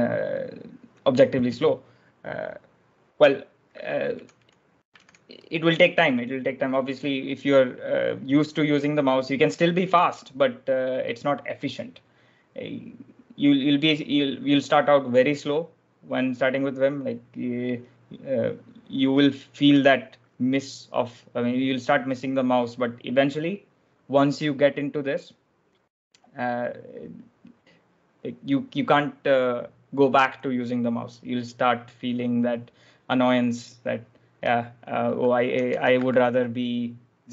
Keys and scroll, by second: 4.0-5.4 typing, 19.6 j, 35.0-36.5 typing.